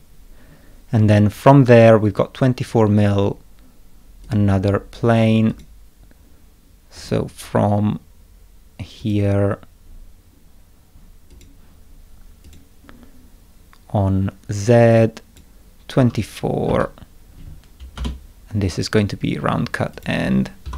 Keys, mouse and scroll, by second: 4.2 click, 5.5 click, 6.9 click, 9.0 click, 11.3 click, 12.4 click, 14.9 click, 16.0 2, 16.6 4, 17.9 Return, 19.5 middle click, 19.9 click, 20.6 F2.